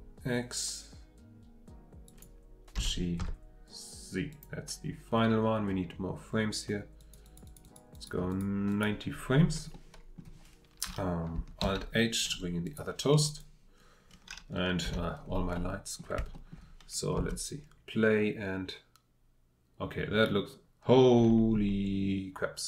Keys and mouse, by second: 2.7 g, 3.2 z, 4.3-5.8 drag, 9.7-11.6 drag, 11.6 alt+h, 14.8 h, 17.2 space.